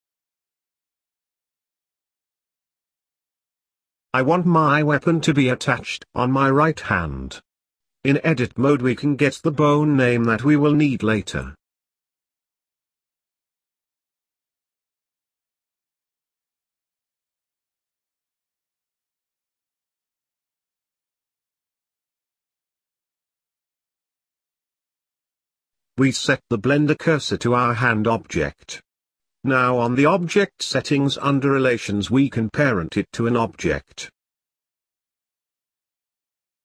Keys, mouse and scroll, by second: 0.2-1.5 middle drag, 1.5 click, 2.2 click, 2.6 click, 4.6-6.3 drag, 6.3 scroll down 1, 7.1 click, 13.9 click, 15.8 click, 16.2 scroll up 1, 16.3 middle click, 16.8 g, 18.2-19.2 scroll up 3, 19.7 click, 20.4-21.9 middle drag, 21.9 click, 23.4 click, 27.0 shift+s, 29.0 shift+s, 29.4-32.2 middle drag, 32.2-36.6 click.